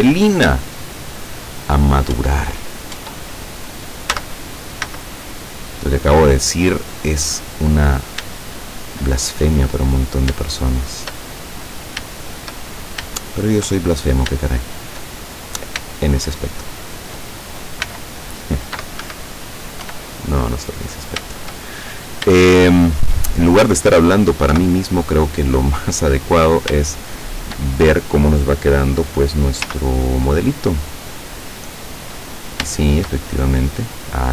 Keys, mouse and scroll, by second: 0.9 scroll down 2, 2.2 Tab, 3.1 Tab, 4.2 z, 4.9 z, 5.9 scroll up 2, 6.3 scroll down 2, 6.8-8.4 middle drag, 8.5 shift+middle click, 10.0 right click, 11.0 shift+right click, 11.4-13.8 shift+middle drag, 13.9 shift+middle click, 14.6 shift+middle click, 15.2 shift+middle click, 15.9 shift+right click, 16.8 shift+right click, 17.9 x, 19.0 Escape, 19.9 e, 20.9 click, 21.6 shift+middle click, 22.5 shift+middle click, 24.6 KP_7, 25.5-26.1 scroll down 2, 26.4 scroll down 2, 27.0 shift+middle click, 27.8-28.1 shift+scroll up 2, 29.7 z, 30.8-33.3 middle drag, 33.3-34.3 shift+middle drag.